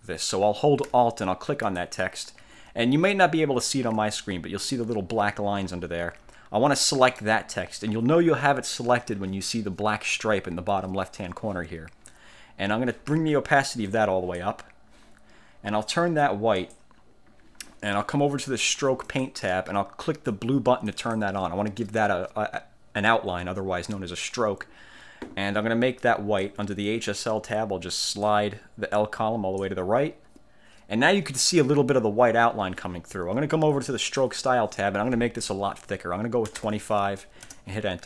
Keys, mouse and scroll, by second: 1.8 alt+click, 4.2-4.8 ctrl+scroll up 2, 5.8-6.5 ctrl+scroll down 4, 6.9 ctrl+click, 14.0 click, 16.7 click, 19.2 click, 21.0 click, 26.1 click, 28.4-29.9 drag, 34.4 click, 36.4-37.3 typing, 37.6 Return.